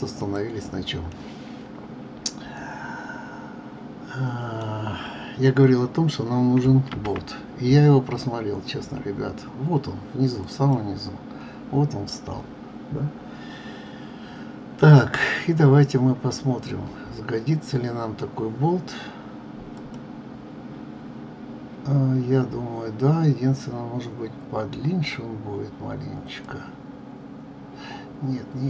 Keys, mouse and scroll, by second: 0.2 click, 1.1-4.3 middle drag, 4.7 scroll down 4, 6.9 shift+a, 11.6 scroll down 1, 15.0-15.7 scroll down 2, 15.7-16.6 scroll up 4, 16.6-19.7 scroll down 4, 19.7-22.7 drag, 26.4-28.6 drag.